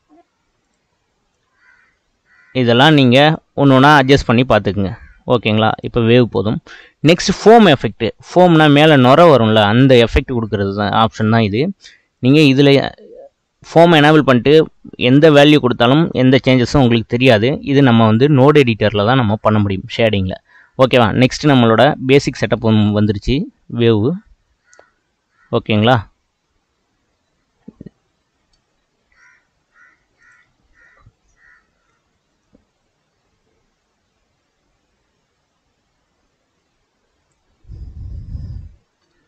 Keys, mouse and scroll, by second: 1.3-4.3 drag, 4.3 scroll down 2, 5.7-8.6 drag, 8.6-9.2 middle drag, 9.2 scroll up 2, 9.6-11.6 middle drag, 11.6 click, 12.1-15.3 drag, 15.7-17.4 drag, 17.4-20.6 middle drag, 21.6 scroll down 3, 21.9-22.6 middle drag, 22.6 space, 23.7 scroll up 3, 28.5 space, 30.2-35.5 drag, 38.8 space.